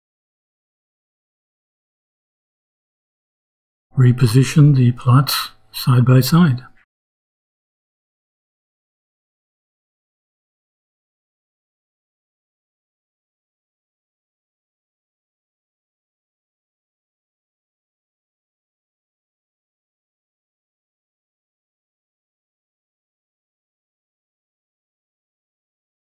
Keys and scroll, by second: 2.5 ,, 3.8 Return, 4.3 shift+Return, 4.3-8.2 typing, 9.5 -, 10.1 shift+., 11.5-19.2 typing, 19.9 shift+Return.